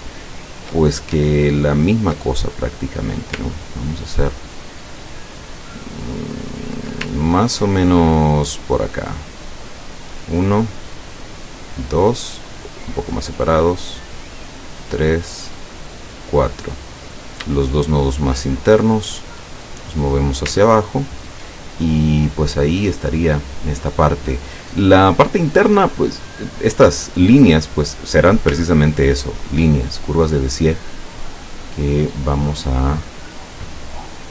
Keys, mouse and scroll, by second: 1.5-2.0 ctrl+scroll down 2, 2.4-3.5 ctrl+drag, 4.4-6.4 ctrl+middle drag, 9.7 click, 11.5 click, 14.5 click, 15.8 click, 17.1 click, 18.1 shift+click, 19.0-20.6 drag, 20.8 ctrl+scroll down 1, 21.9 ctrl+click, 28.0 click, 28.8-29.3 ctrl+scroll down 1, 31.4 click, 33.7-34.3 drag.